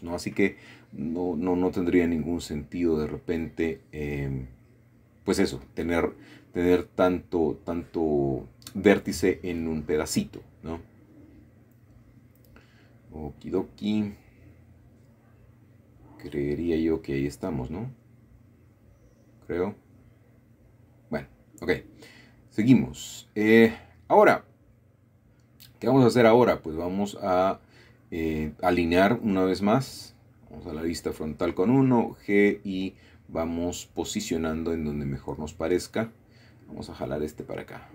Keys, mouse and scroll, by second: 1.8 click, 3.1-4.1 typing, 3.4 click, 5.2 click, 6.1 typing, 6.5 click, 7.5-8.3 typing, 8.8 click, 10.5 click, 10.5 typing, 11.5-12.8 shift+middle drag, 12.7-13.1 scroll up 1, 13.6-14.4 scroll down 1, 14.4 shift+middle click, 15.0 shift+middle click, 15.3-15.7 scroll down 1, 16.6 middle click, 19.3 typing, 20.1 shift+middle click, 21.2 shift+middle click, 21.3 typing, 21.7-22.3 scroll up 1, 22.3-23.5 shift+middle drag, 25.8 shift+middle click, 26.8 shift+middle click, 27.2-27.8 scroll down 1, 28.0 typing, 29.0 scroll up 1, 30.2 click, 31.4 g, 34.1 click, 35.0 click, 35.2 g, 36.6 click, 36.9 typing.